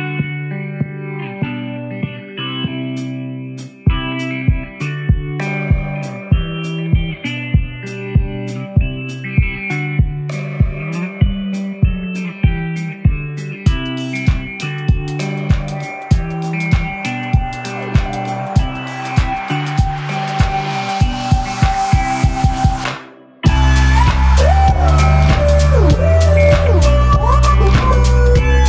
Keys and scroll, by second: 0.3 Return, 1.8 Return, 3.1 i, 5.1 i, 13.6 super+p, 13.8-14.9 typing.